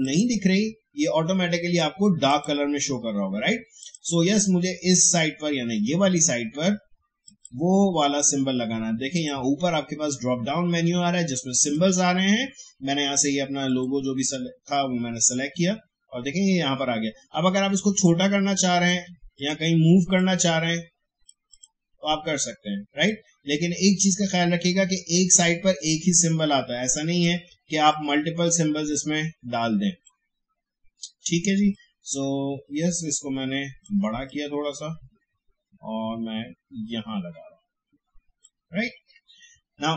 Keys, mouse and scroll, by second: 0.0 click, 7.2 click, 11.6 click, 17.8-27.9 drag, 27.9-39.9 drag.